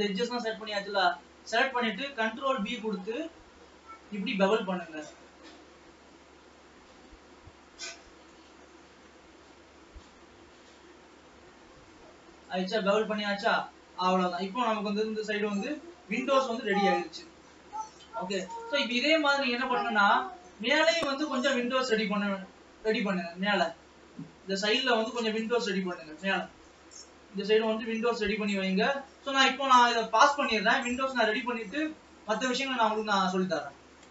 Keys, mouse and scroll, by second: 0.9-2.1 middle drag, 2.1-2.9 scroll up 2, 3.1 ctrl+b, 13.0-13.6 scroll down 6, 13.9-15.2 middle drag, 15.2 KP_0, 15.9 alt+a, 16.4 Tab, 16.9-17.8 scroll up 2, 17.8 ctrl+s, 18.2 Tab, 18.9 middle click, 19.5-20.1 scroll down 2, 20.1-22.2 middle drag, 22.2-22.9 scroll up 4, 22.9-24.3 middle drag, 24.3-24.6 scroll down 2, 24.6-25.8 shift+middle drag, 25.8 scroll down 3, 26.1-31.3 middle drag, 31.3-31.6 ctrl+scroll up 4, 32.4-34.1 shift+middle drag.